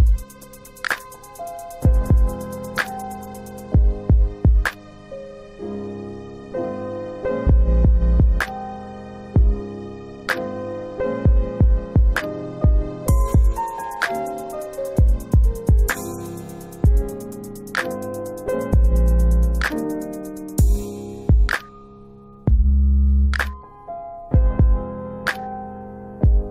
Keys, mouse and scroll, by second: 1.0 click, 6.1 alt+middle click, 9.9 click, 11.6 typing, 12.7 click, 13.4 alt+middle click, 14.0 F4, 14.3 scroll down 2, 15.0 alt+middle click, 17.9 middle click, 18.7 alt+middle click, 21.4 click, 22.9 alt+middle click, 23.6 middle click, 23.8 scroll up 1, 24.3 alt+middle click, 26.1 click.